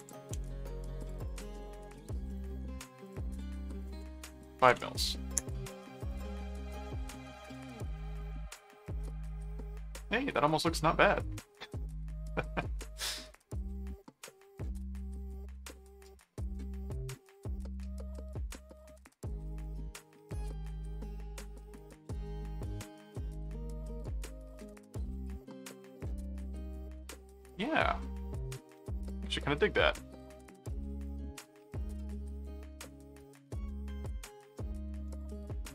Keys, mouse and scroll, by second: 0.0 click, 1.0 click, 1.3 right click, 2.3 click, 3.0 click, 6.1 click, 7.9 middle click, 9.0-11.1 middle drag, 12.0-13.0 middle drag, 13.7 middle click, 14.7 middle click, 16.7-18.6 middle drag, 19.5 click, 20.6-32.4 middle drag, 33.0-34.3 middle drag, 35.1 click.